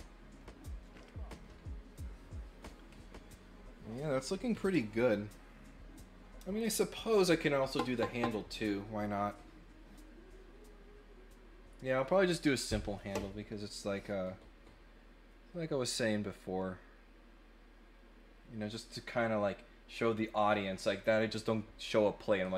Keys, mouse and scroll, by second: 18.7 middle click.